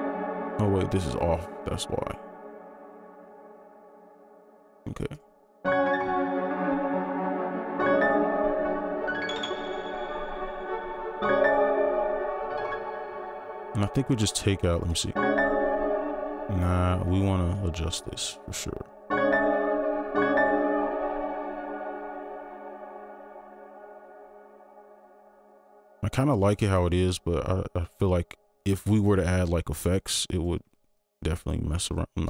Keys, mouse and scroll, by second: 0.2 scroll down 1, 1.0 ctrl+click, 2.0-4.9 scroll down 1, 12.7 space, 13.5 right click, 15.9 space, 16.6 ctrl+z, 17.8 shift+Down, 19.7 space, 19.8 shift+Up, 22.6 ctrl+click, 23.2 shift+Down, 24.6 ctrl+click, 25.8 shift+Down, 26.0 shift+Down, 26.6 ctrl+click, 27.2 shift+Down, 28.1 ctrl+click, 28.9 shift+Down, 30.3 ctrl+click, 31.7 ctrl+s, 31.8 shift+Down.